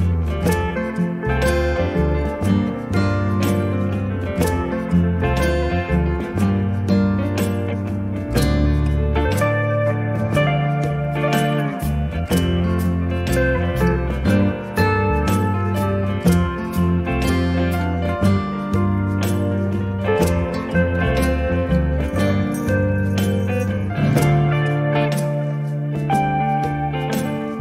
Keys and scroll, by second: 4.1 KP_Divide, 4.5 4, 4.9 Return, 8.6 r, 12.6 space, 15.5 f, 17.6 KP_Decimal, 17.8 5, 18.3 Return, 26.7 space.